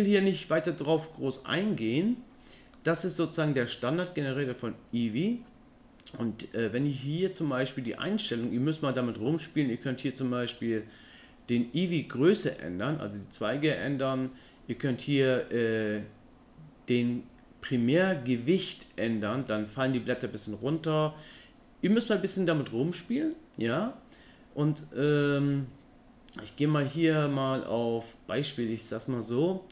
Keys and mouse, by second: 1.0 middle click, 2.7 middle click.